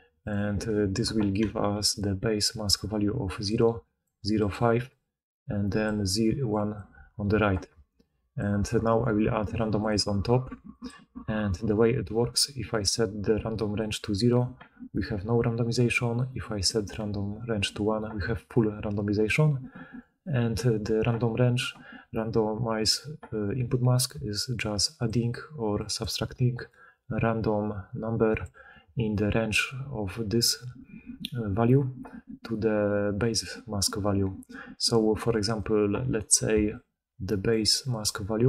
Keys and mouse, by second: 0.2-0.7 right drag, 0.7-4.0 drag, 1.6-8.4 typing, 1.9-4.0 middle drag, 1.9-4.0 right drag, 24.0-28.5 d, 26.3-36.4 drag, 26.3-35.5 middle drag, 26.3-35.5 right drag, 36.4 middle click, 36.4 right click, 36.4-38.3 d, 36.6 click, 37.5-38.4 drag, 37.5-38.4 middle drag, 37.5-38.4 right drag.